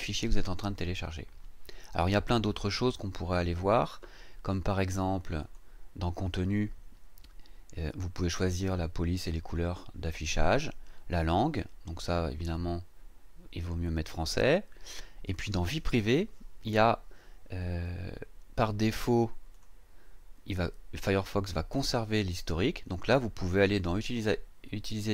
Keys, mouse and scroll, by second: 5.4 click, 15.3 click, 19.5 click.